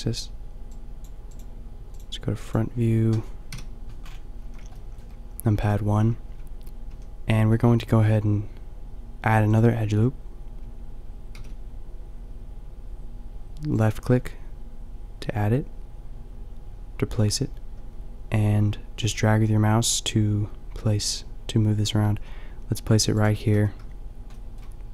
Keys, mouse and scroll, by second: 3.5 KP_5, 4.4 a, 6.3 Tab, 6.9 a, 7.8 ctrl+r, 23.6 a, 24.3-24.9 middle drag.